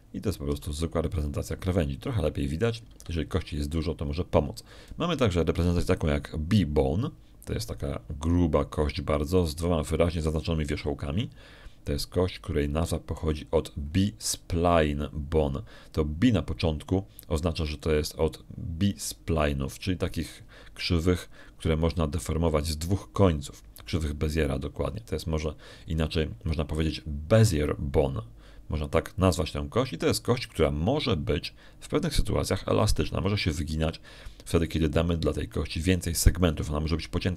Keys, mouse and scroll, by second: 0.3 shift+click, 2.3 r, 4.7 Escape, 7.3 click, 11.3 click, 13.9-15.2 middle drag.